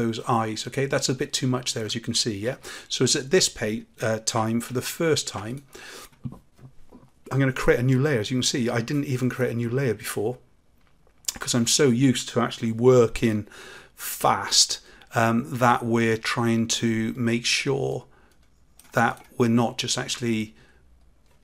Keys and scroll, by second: 2.4 ctrl+z, 4.6 ctrl+alt+z.